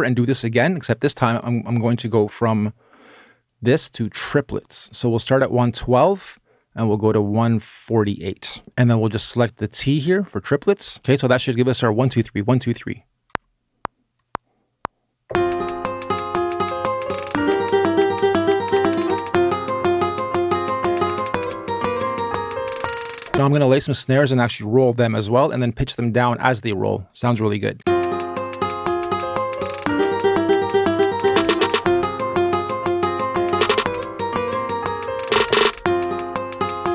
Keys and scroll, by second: 8.6 BackSpace, 13.1 r, 23.3 space, 27.6 space, 28.4 r.